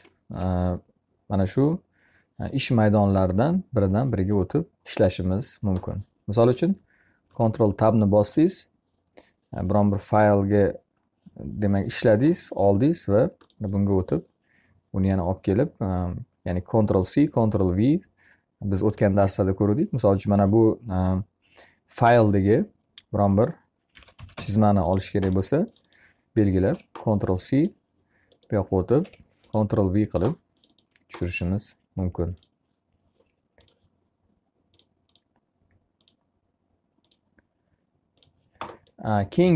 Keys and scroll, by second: 6.6 ctrl+Tab, 23.2 r, 26.4 ctrl+c, 28.7 ctrl+v, 31.0 e.